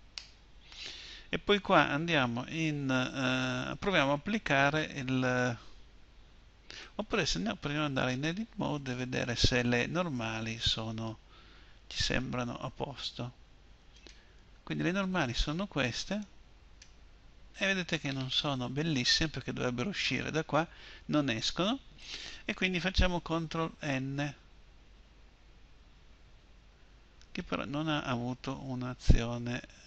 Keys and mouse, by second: 7.3 Tab, 23.4 ctrl+n.